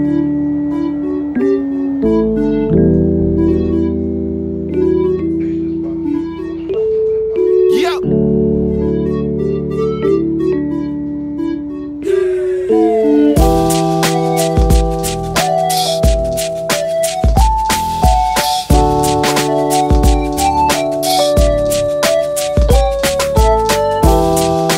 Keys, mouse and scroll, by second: 0.1 shift+a, 3.2 ctrl+2, 5.1 middle click, 5.3 ctrl+a, 5.9 Tab, 8.1 2, 8.2 3, 8.6 c, 12.3 shift+g, 15.0 ctrl+i, 15.9 middle click, 16.2 middle click, 16.4 right click, 17.5-23.3 right drag, 24.3-24.7 right drag.